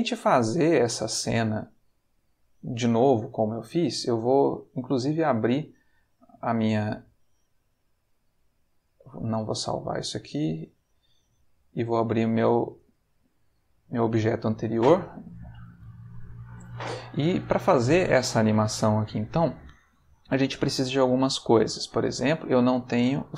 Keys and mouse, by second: 3.7 click, 5.7 click, 8.8 click, 10.4 click, 11.6 click, 12.7 click, 14.6 a, 15.6 alt+g, 15.7 alt+r, 16.2 alt+s, 21.6 ctrl+middle click.